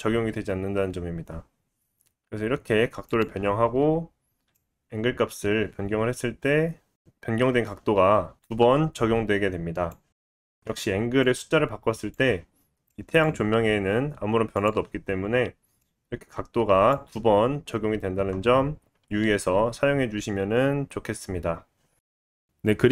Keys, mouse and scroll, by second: 4.5-22.9 drag, 13.7 r.